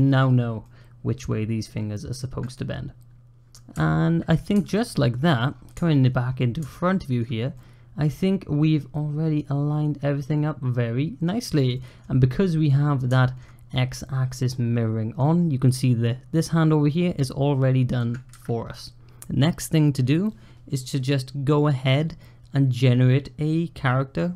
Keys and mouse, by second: 0.5-2.3 middle drag, 3.6 `, 4.4 `, 5.6 shift+middle click, 6.6-7.0 shift+middle drag, 7.4-11.1 middle drag, 11.6 middle click, 13.0 shift+middle drag, 14.2-15.0 middle drag, 17.0-17.8 middle drag.